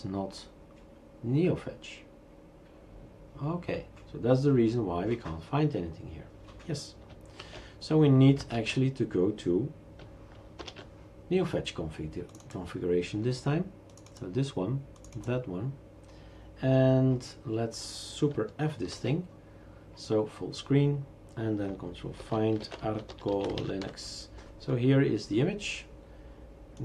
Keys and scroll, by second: 7.4 shift+super+q, 8.5 shift+super+q, 10.6 shift+super+Return, 19.0 super+f, 22.2 ctrl+f, 22.4-24.3 typing.